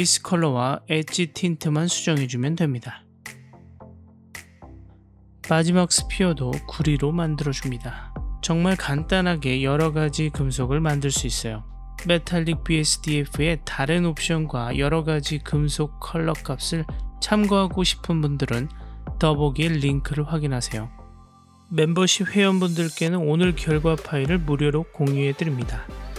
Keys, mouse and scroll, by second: 10.0 F12.